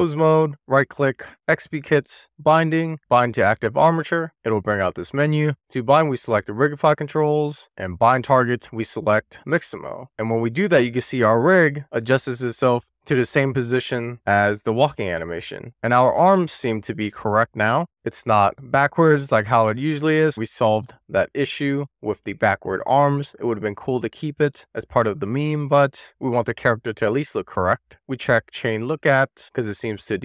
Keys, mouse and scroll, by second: 0.4-3.6 right drag, 4.2-4.8 shift+middle drag, 5.0 middle click, 5.8-7.4 drag, 8.1-10.0 drag, 15.2-19.2 middle drag, 19.6-24.0 shift+middle drag, 28.7 click, 29.4 click, 30.1 scroll up 1.